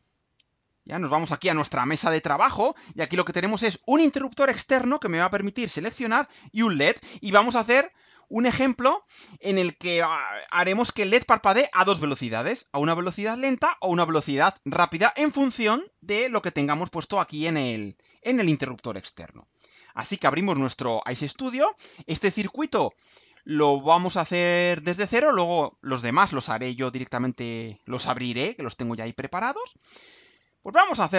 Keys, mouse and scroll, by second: 0.2 click, 19.8 click, 22.7 click, 23.4-24.5 drag, 25.2 click.